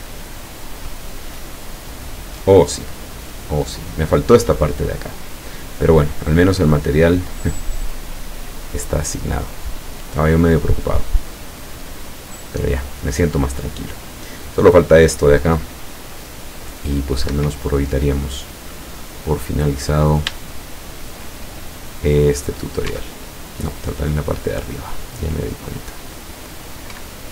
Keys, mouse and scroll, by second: 17.3 Escape, 17.9-18.3 scroll up 1, 18.4-19.6 middle drag, 19.9-20.4 scroll up 1, 20.7 shift+click, 21.7 shift+middle click, 21.9 click, 22.5 right click, 22.9 Tab, 24.2-24.8 scroll up 2, 27.0 a.